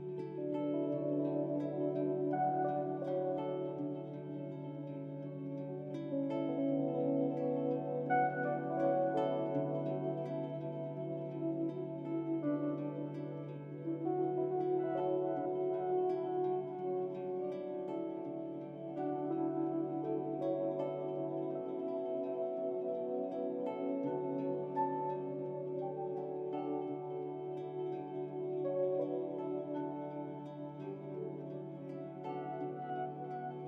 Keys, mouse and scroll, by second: 1.9-4.9 drag, 6.2-9.4 drag, 13.9 Tab, 18.9 click, 21.8-22.8 drag, 28.6 KP_6.